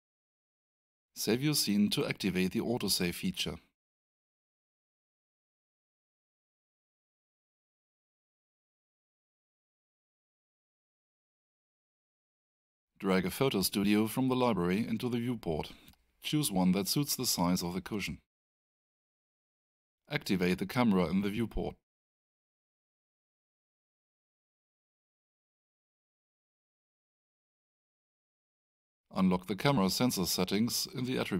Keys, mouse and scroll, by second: 0.1 click, 4.0-6.3 typing, 7.8 Return, 23.9 click, 27.7 scroll up 1, 29.9 click.